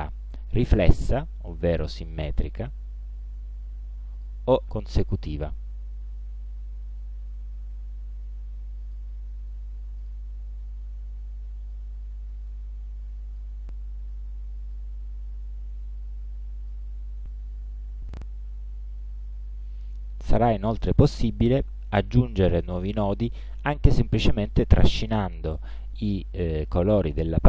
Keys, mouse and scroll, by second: 0.7 click, 4.2 click, 5.4 click, 8.9 click, 10.1 click, 11.8-15.0 drag, 15.9 click, 24.6-27.4 drag.